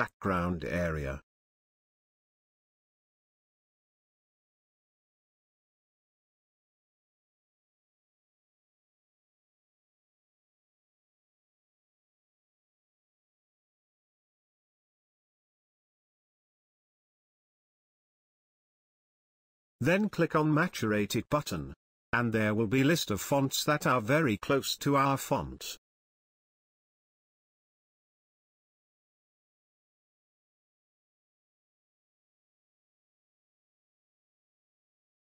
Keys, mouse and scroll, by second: 3.4-6.1 drag, 28.2-30.4 drag, 34.0-35.3 drag.